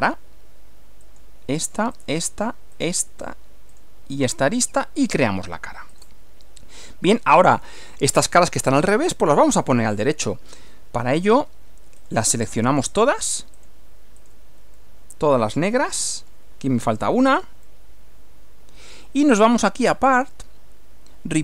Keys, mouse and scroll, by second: 0.1 click, 1.0 click, 1.9 ctrl+click, 2.7 ctrl+click, 3.7 ctrl+click, 4.7 click, 5.9 click, 6.4-7.8 middle drag, 8.7-10.2 middle drag, 12.0 click, 12.9 ctrl+click, 13.5 ctrl+click, 14.2 ctrl+click, 14.7-16.5 ctrl+middle drag, 16.9 ctrl+click, 17.7-19.1 ctrl+middle drag, 20.1 click.